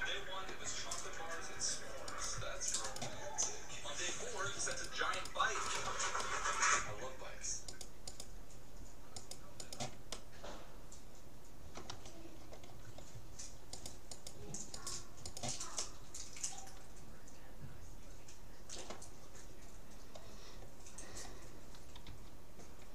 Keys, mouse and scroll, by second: 1.3 middle click, 2.1-3.6 right drag, 3.5 middle click, 6.2-7.3 drag, 6.3-8.1 middle drag, 7.7 click, 7.9-11.2 right drag, 10.1-11.3 drag, 11.3-13.3 middle drag, 13.7-16.5 right drag, 15.9 click, 16.5-17.7 middle drag, 20.1-21.7 middle drag, 22.0 g.